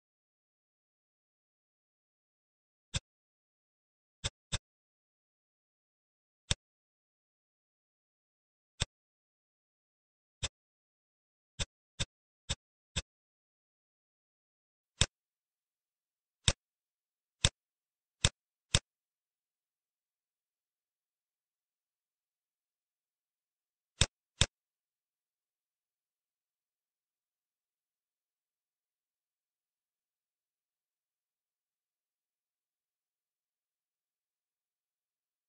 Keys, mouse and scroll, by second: 1.0 s, 3.3-4.2 middle drag, 4.2 click, 4.5-6.0 middle drag, 6.4 click, 7.1 ctrl+s, 7.2-7.7 scroll up 1, 7.7-8.7 scroll down 2, 8.7-10.3 middle drag, 10.3 click, 11.3 Tab, 11.5 click, 12.5 shift+click, 12.9 shift+click, 15.0 shift+click, 16.6 click, 17.6 click, 18.9-21.8 middle drag, 23.5 ctrl+s, 24.1 click, 24.5-27.6 middle drag, 32.6 ctrl+s.